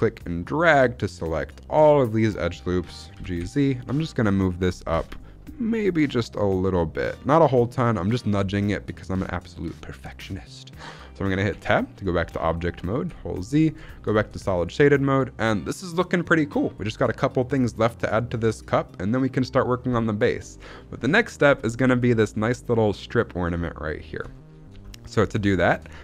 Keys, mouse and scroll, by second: 3.0 g, 3.3 z, 4.6 right click, 4.8 g, 6.2 z, 6.9 click, 7.6 shift+middle click, 11.4 Tab, 12.1-12.6 scroll down 2, 12.6-13.7 scroll up 2, 13.0 z, 13.8 shift+middle click, 14.0-14.3 scroll down 2, 14.3-14.8 shift+middle drag, 20.4 middle click, 20.8-22.6 scroll up 3, 21.2 middle click, 22.6-23.3 scroll up 1, 23.3-24.0 scroll down 2, 24.2 shift+middle click, 24.4-25.1 scroll up 2, 24.8-25.1 shift+middle drag, 25.5 shift+middle click, 25.7-26.0 scroll up 1.